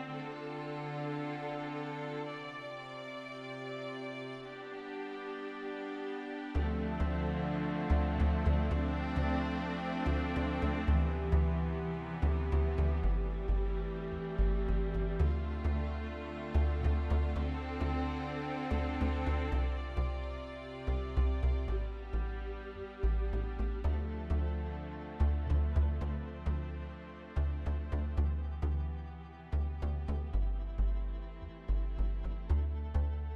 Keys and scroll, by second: 25.0 0, 25.2 Return, 27.4 Return.